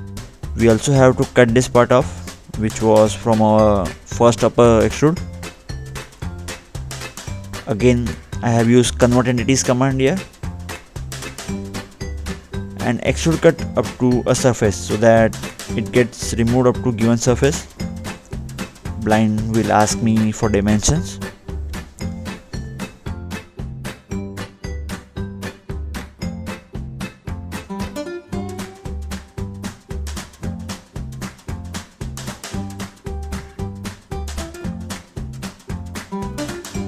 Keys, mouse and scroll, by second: 1.2 click, 1.5 scroll up 2, 1.7-2.0 scroll down 2, 3.0 click, 3.0 click, 3.2 scroll up 1, 3.5 middle click, 5.3 middle click, 5.3 click, 5.8 double click, 6.9 click, 7.1 double click, 9.0 click, 9.3 middle click, 9.9 scroll down 2, 11.0 middle click, 11.8-12.7 scroll up 2, 14.2 click, 15.1-15.5 scroll up 2, 16.2 scroll down 2, 17.1 middle click, 18.7 click, 19.8-20.2 scroll up 2, 20.8 scroll down 2, 21.5-21.8 scroll down 1, 22.6-24.4 scroll up 2, 24.4 click, 26.7 click, 27.1 scroll up 2, 27.7 scroll up 1, 28.0 middle click, 29.0 scroll up 1, 29.2 scroll down 2, 30.4 click, 31.1-31.7 scroll up 2, 31.7 middle click, 32.1-32.6 scroll down 2, 33.1 middle click, 35.6 click.